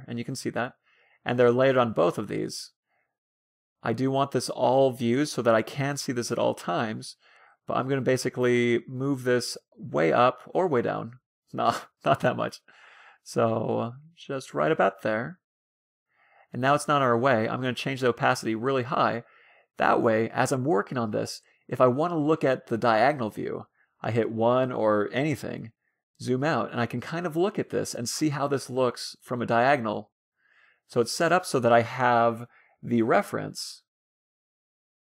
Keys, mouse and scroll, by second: 0.0-1.7 drag, 1.3-3.1 middle drag, 3.3-5.0 middle drag, 7.2-8.8 middle drag, 8.2-10.9 drag, 11.8 ctrl+z, 12.7-14.2 drag, 14.4-15.7 drag, 16.1-17.7 middle drag, 17.9-19.5 drag, 19.6-20.3 scroll up 2, 20.3-21.9 middle drag, 21.3 n, 21.7-23.3 alt+drag, 22.3-24.1 middle drag, 24.5 KP_1, 25.3-27.7 middle drag, 27.7-28.3 scroll down 1, 28.3 scroll up 2, 29.2 scroll down 2, 29.3 middle click, 30.6 KP_3, 31.6 middle click, 33.8 middle click.